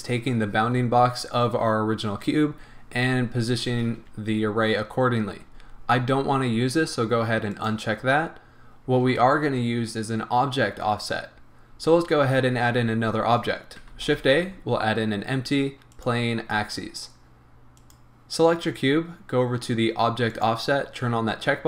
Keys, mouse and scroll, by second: 7.5 click, 13.9 shift+a, 17.8 click, 20.3 click.